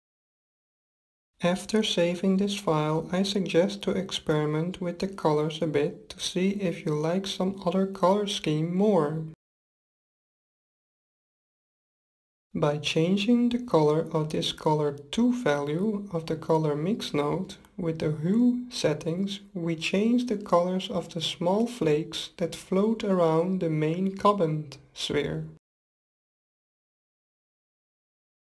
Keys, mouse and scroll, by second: 5.8-6.6 scroll down 1, 6.6-8.4 middle drag, 9.9-11.6 middle drag, 12.9 middle click, 13.4-15.2 drag, 13.5 middle click, 22.0-23.7 drag.